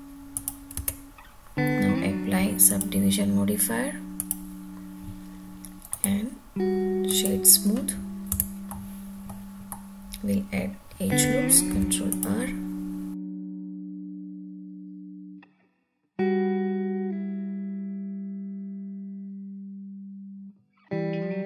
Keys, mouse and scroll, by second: 0.4 click, 0.8 Tab, 2.7-4.5 drag, 5.9 right click, 8.3 Tab, 8.7 middle click, 9.7 middle click, 11.7 ctrl+r, 13.5 click, 13.8 middle click, 14.3 ctrl+r, 15.2 click, 15.5 ctrl+r, 17.0 click, 17.2 middle click, 17.5-17.8 scroll up 2, 17.8 ctrl+r, 19.3 click, 19.5 ctrl+r, 20.2 click, 20.3 middle click, 20.7 scroll up 2, 20.8 shift+middle click, 21.3 ctrl+r.